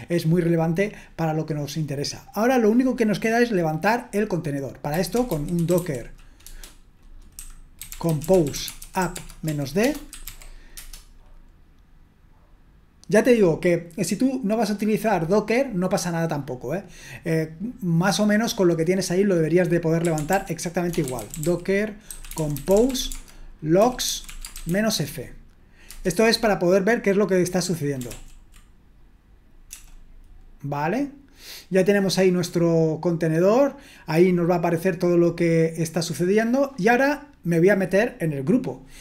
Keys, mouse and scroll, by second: 4.7-6.3 typing, 7.4-10.8 typing, 19.8-25.2 typing, 25.9 Return, 28.1 ctrl+l, 29.7 BackSpace, 36.9 click.